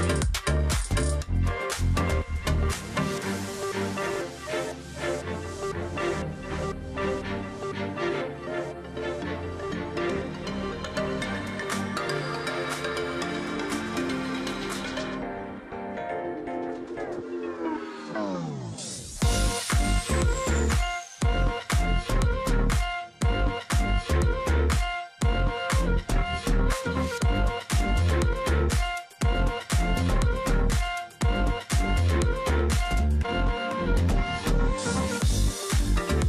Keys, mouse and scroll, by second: 0.0 ctrl+click, 0.1 alt+scroll down 1, 0.3 space, 1.9-2.5 alt+scroll up 1, 3.6 ctrl+z, 4.1 alt+scroll down 1, 4.3 space, 5.4 alt+scroll up 1, 5.5 space, 7.4 space, 8.9 ctrl+z, 9.9 space, 11.0 space, 12.4 ctrl+click, 12.6 alt+scroll down 1, 13.0-13.6 alt+scroll up 1, 13.7 ctrl+z, 14.8 space, 16.3 space, 17.8 alt+scroll down 1, 18.0 space, 18.6-19.5 alt+scroll up 1, 19.5 shift+x, 20.3 ctrl+shift+click, 21.9 alt+click, 22.4 ctrl+click, 22.6 alt+scroll down 1, 22.8 space, 23.8-24.4 alt+scroll up 1, 24.9 space, 25.5 ctrl+click, 26.1 space, 27.3 space, 28.6 space, 29.7 double click, 29.9 space, 30.0 space, 30.4 ctrl+z, 32.1 space, 33.6 space, 34.1 ctrl+click, 36.0-36.2 alt+scroll up 1.